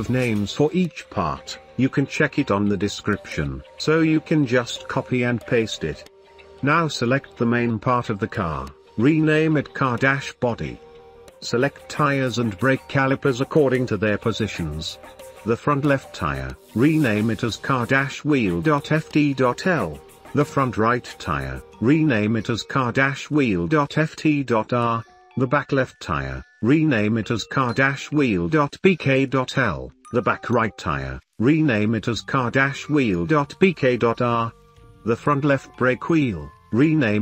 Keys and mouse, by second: 10.5 F2, 11.3 F2, 11.9 F2, 13.9-14.3 shift+middle drag, 15.2 middle click, 17.8 F2, 20.1 middle drag, 20.5 shift+middle click, 20.9 middle drag, 21.3 shift+middle click, 21.9 middle click, 22.9 F2, 24.5 middle click, 24.8 shift+middle click, 25.3 middle click, 25.5 shift+middle click, 25.8 middle drag, 26.3 middle drag, 27.1 middle click, 27.4 shift+middle click, 28.7 F2, 31.9-32.2 shift+middle drag, 32.9 F2, 35.9 click.